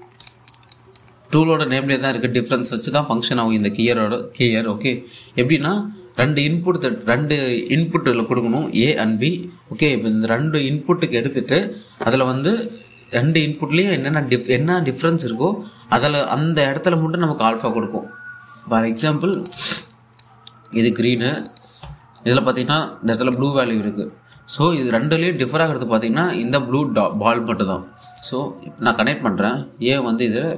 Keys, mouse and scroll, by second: 0.3 v, 0.7 scroll up 1, 0.9 alt+click, 1.4 click, 20.0 click, 20.2 1, 20.8 click, 22.5 2, 23.6-25.5 drag, 25.2-29.5 typing, 30.1-30.5 drag.